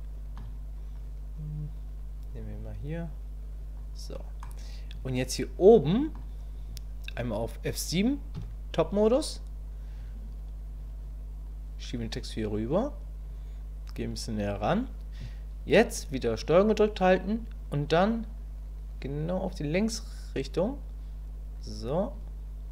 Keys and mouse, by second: 0.9-2.2 drag, 2.5-3.7 drag, 4.4-6.1 middle drag, 8.4 KP_7, 11.5-13.2 drag.